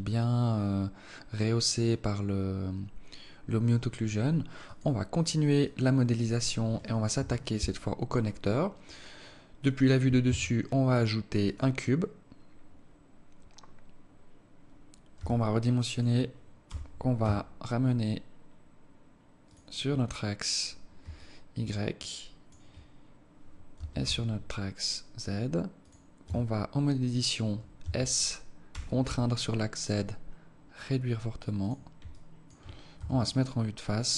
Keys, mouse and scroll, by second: 5.6 click, 7.0 KP_7, 8.0-8.4 scroll down 7, 8.8-9.1 scroll up 4, 10.2 shift+a, 15.0 s, 16.6 g, 21.0 alt+click, 21.8 alt+click, 23.6 g, 26.2 Tab, 27.7 s, 32.0 alt+click, 32.8 KP_1, 33.6-33.9 scroll up 2.